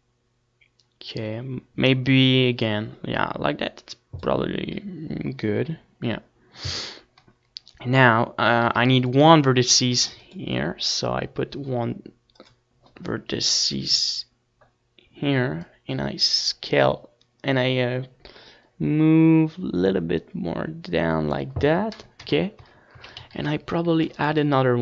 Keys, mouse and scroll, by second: 4.0 a, 4.6 ctrl+r, 7.4-12.3 drag, 17.2 Tab, 17.6 Tab, 17.8 a, 18.3 ctrl+r, 19.7 click, 19.8 Tab, 20.5 ctrl+s.